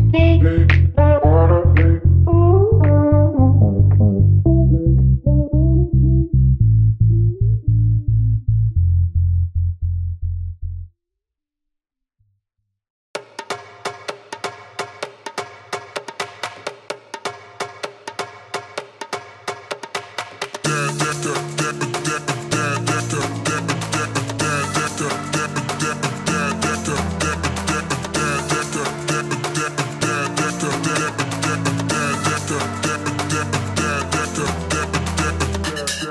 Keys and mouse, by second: 0.5 s, 1.0 s, 2.3-12.8 drag, 6.8 KP_1, 6.8 KP_3, 12.3 z, 12.8-15.4 middle drag, 13.0 s, 13.9 s, 15.4 click, 16.0-27.4 middle drag, 16.8 s, 20.0 KP_1, 20.8 s, 21.9 r, 23.3 g, 23.8 r, 25.2 g, 26.0 s, 27.4-28.6 drag, 28.0 s, 28.6 middle click, 29.5-34.1 shift+drag, 32.2 KP_1, 32.3 KP_3, 33.2 g, 34.1-35.6 middle drag, 35.0 shift+d, 35.6-36.1 drag.